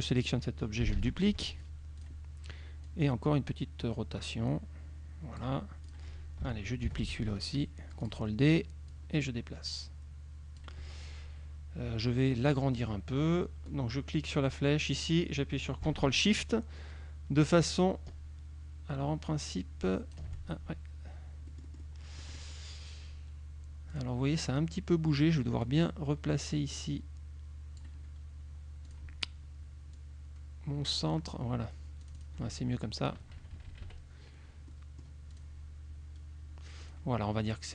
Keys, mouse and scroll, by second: 1.0 ctrl+d, 2.0 click, 2.9-5.6 drag, 5.9 click, 7.0 ctrl+d, 8.1 click, 9.0-10.8 drag, 12.5 click, 13.7-20.4 drag, 21.6-22.6 drag, 24.0 click, 25.7-28.1 drag, 29.0 click, 30.0-31.6 drag, 32.1 click, 33.3 KP_Subtract, 34.8 middle click, 35.4 click, 36.9 click.